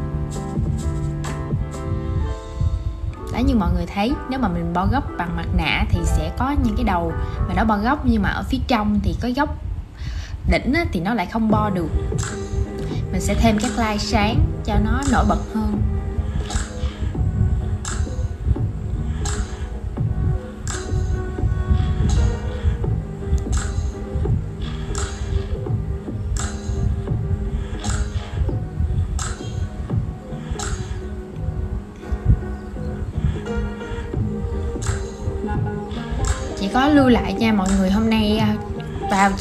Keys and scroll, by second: 18.8 super+z, 24.8 super+z, 25.3 super+z, 25.6 super+z, 26.3 super+z, 26.5 super+z.